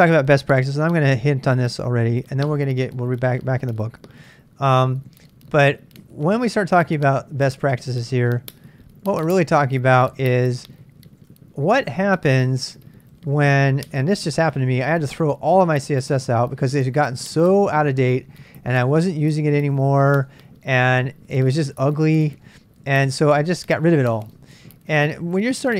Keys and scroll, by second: 0.6 super+Tab, 1.7 super+Tab, 4.2-7.0 typing, 7.7 ctrl+a, 7.9 ctrl+a, 9.2 ctrl+a, 10.3 ctrl+a, 10.5 ctrl+a, 11.0-11.8 typing, 13.3-18.6 typing, 16.7 Tab, 18.8 Tab, 19.0 Tab, 19.7 ctrl+c, 19.7-20.1 typing, 20.3 Return, 21.2-23.7 typing, 24.0 Tab, 24.9 Tab.